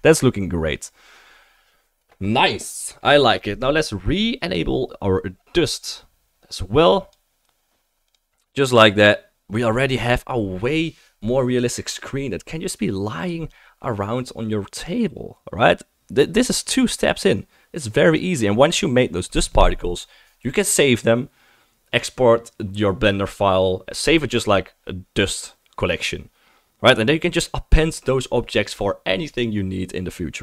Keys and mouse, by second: 0.3-6.8 right drag, 4.4 click, 7.1-8.2 drag, 7.1-8.2 middle drag, 7.1-30.4 right drag.